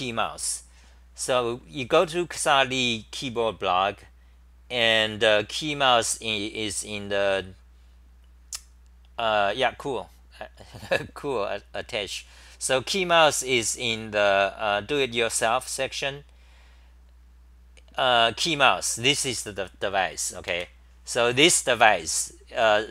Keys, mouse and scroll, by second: 14.3 Delete, 17.3 Delete, 20.7 Delete.